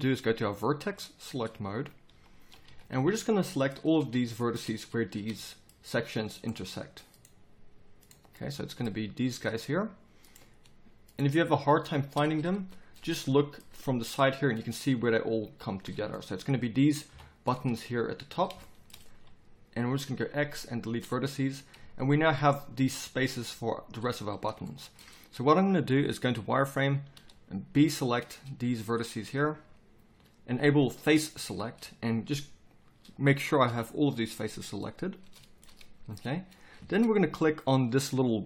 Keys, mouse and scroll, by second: 1.7 click, 2.1 z, 2.9 z, 5.5 middle click, 6.4-8.3 middle drag, 8.3 right click, 8.5-12.0 middle drag, 12.0-13.9 drag, 13.9 z, 17.1 KP_7, 20.3 x, 21.6 z, 24.7 click, 25.4 z, 27.1 b, 30.9-31.5 drag, 31.5-33.7 middle drag, 33.7 b.